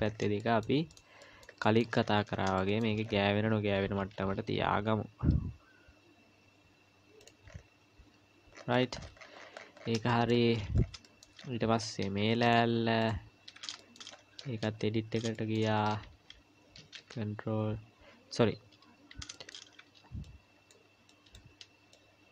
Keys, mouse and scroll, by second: 0.4 shift+middle click, 2.0-2.6 scroll up 3, 2.6 shift+middle click, 3.0-4.1 scroll up 2, 4.1 g, 7.5 scroll up 1, 8.5 scroll down 1, 8.6-10.1 scroll down 38, 10.1 shift+middle click, 10.5-11.0 scroll down 5, 11.0 shift+middle click, 11.5-12.5 scroll up 6, 12.2 Tab, 12.5 click, 13.0 click, 13.8 shift+middle click, 14.1-14.8 scroll up 5, 14.6 Tab, 15.3 shift+middle click, 15.8 scroll up 1, 17.0 ctrl+r, 21.1 click, 21.9 click.